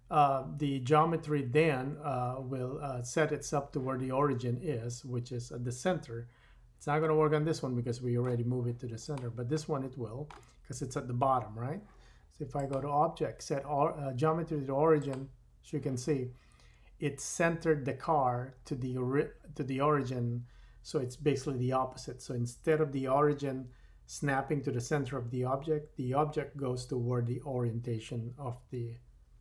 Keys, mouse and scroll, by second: 7.1-9.0 middle drag, 9.0 click, 9.2-12.5 middle drag, 12.5-17.3 drag.